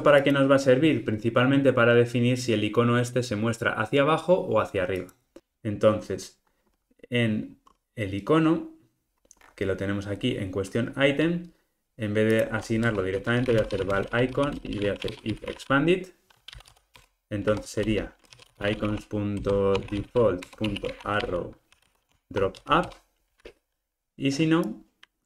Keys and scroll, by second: 17.0 Return.